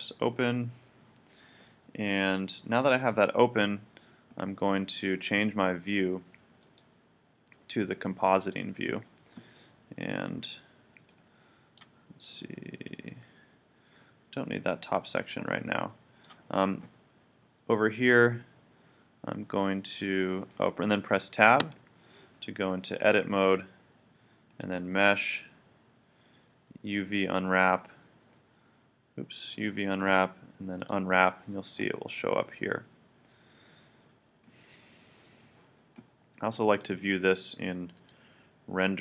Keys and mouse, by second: 0.0-1.7 drag, 6.6-8.2 drag, 12.5 click, 12.6 click, 13.2 click, 13.6 click, 21.7 Tab, 36.7-38.4 drag.